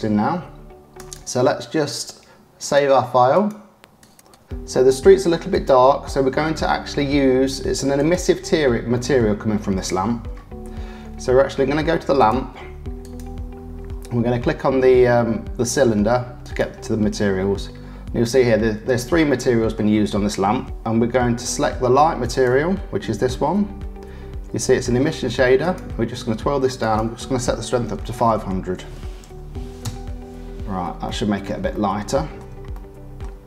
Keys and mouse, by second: 2.7 click, 6.6 click, 8.0 click, 8.9 shift+middle click, 10.0 middle click, 12.2 click, 13.0 click, 16.4 click, 19.4 shift+middle click, 22.2 click, 22.4-25.6 middle drag, 25.6 click, 25.8-26.8 middle drag, 26.8-30.4 drag, 28.1 KP_0, 30.4 middle click, 31.0 click, 31.4 shift+middle click, 31.7 shift+click, 32.1 shift+middle click, 32.7 click.